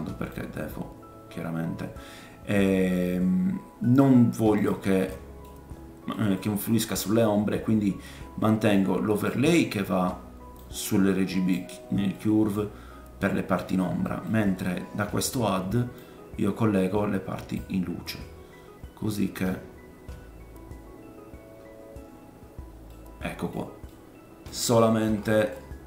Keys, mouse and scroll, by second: 0.3-4.6 drag, 4.6-16.0 middle drag, 8.7-14.1 drag, 8.7-14.1 right drag, 13.5-14.0 scroll down 2, 16.0 click, 22.9 middle click, 23.9 middle click, 25.1 middle click, 25.1-25.6 scroll up 4.